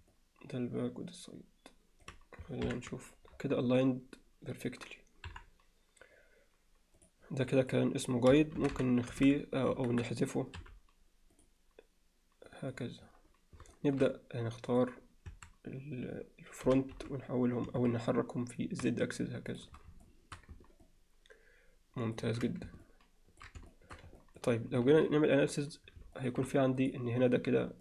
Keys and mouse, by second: 0.1-2.1 middle drag, 2.7 ctrl+KP_1, 5.3 KP_1, 7.0 click, 7.6-10.1 drag, 10.6 m, 12.5 click, 13.7 alt+shift+middle click, 14.8 click, 15.3 a, 16.7 g, 20.1-20.4 alt+shift+middle drag, 20.9-22.2 ctrl+alt+middle drag, 22.8-23.4 ctrl+alt+middle drag, 23.7 shift+middle click, 24.2 ctrl+middle click, 26.2 shift+middle click, 26.9 click.